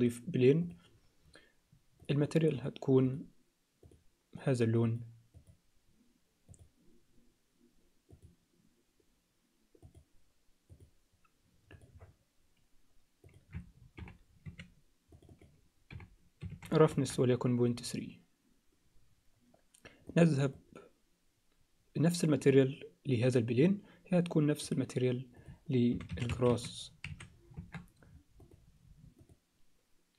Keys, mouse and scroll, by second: 3.0 drag, 3.9 drag, 13.2-17.2 drag, 20.4 click, 24.6 click, 25.4-27.8 drag, 28.5 click, 29.2 click.